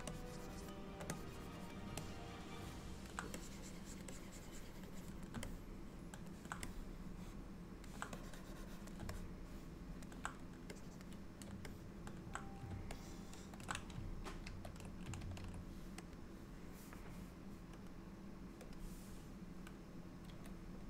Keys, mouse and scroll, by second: 0.2 shift+click, 1.2 click, 2.1 middle click, 3.4 click, 4.2 click, 5.0 click, 5.5 middle click, 6.7 middle click, 8.2 click, 9.2 middle click, 10.8 click, 11.8 middle click, 13.0 ctrl+middle click, 14.5 ctrl+s, 15.2 ctrl+s, 18.0 click, 18.8 click, 20.3 f.